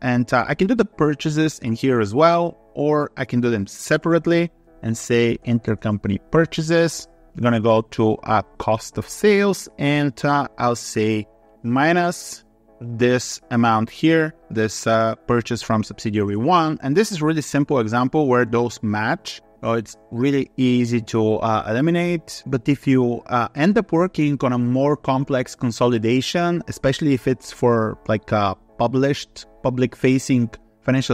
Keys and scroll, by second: 19.2 ctrl+b.